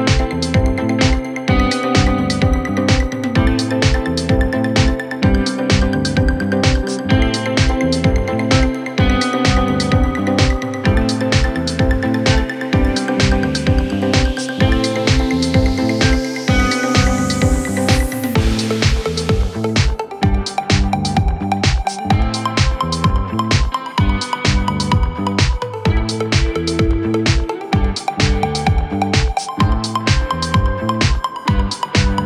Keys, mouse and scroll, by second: 0.6 ctrl+a, 2.7 alt+Down, 5.7 alt+Up, 7.4 click, 9.3 ctrl+t, 10.2-12.1 drag, 12.5-13.2 alt+scroll down 1, 13.2-13.9 alt+scroll down 1, 13.9 alt+scroll up 1, 14.9 click, 17.6 t, 17.8 click, 18.5 ctrl+a, 19.6-21.1 drag.